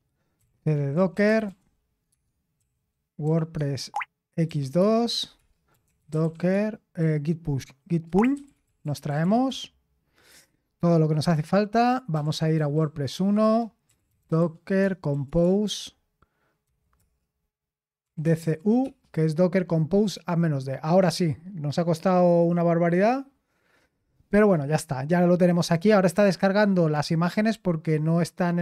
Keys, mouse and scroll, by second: 0.1-9.5 typing, 11.9-15.6 typing, 16.6 typing, 18.2 typing, 20.8-21.6 typing.